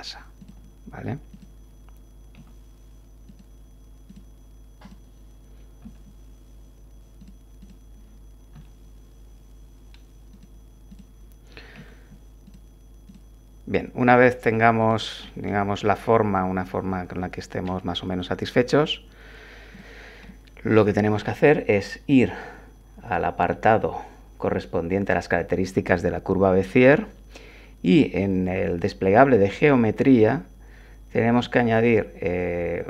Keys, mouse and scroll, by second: 0.4 click, 1.3 click, 2.3 r, 3.2 click, 4.1 click, 4.8 click, 5.8 g, 7.2 click, 7.6 click, 8.5 g, 10.3 click, 10.9 click, 11.7 r, 12.4 click, 13.1 click, 14.1 r, 14.8 click, 15.2 scroll down 1, 15.5-17.8 drag, 18.0 Tab, 19.7 click, 20.3-21.4 drag, 28.3 click.